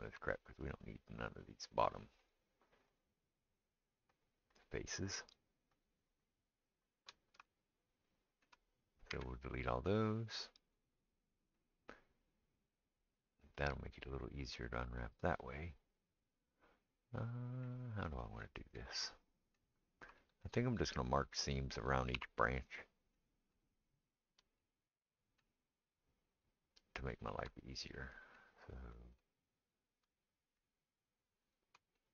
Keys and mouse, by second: 0.1 shift+middle click, 0.4 click, 0.4 middle click, 0.7 click, 0.8 middle click, 1.3 click, 1.5 middle click, 1.6 click, 1.7 middle click, 2.2 shift+click, 2.3-3.5 shift+middle drag, 3.5 shift+click, 4.2 shift+middle click, 4.5 shift+click, 4.6 shift+middle click, 5.1-6.2 shift+drag, 6.2 shift+middle click, 6.9 shift+click, 6.9-24.1 shift+middle drag, 9.1 x, 22.2 2, 22.7 click, 24.1 shift+click, 24.2-32.1 shift+middle drag, 26.3 shift+click, 27.0 shift+click, 31.4 shift+click.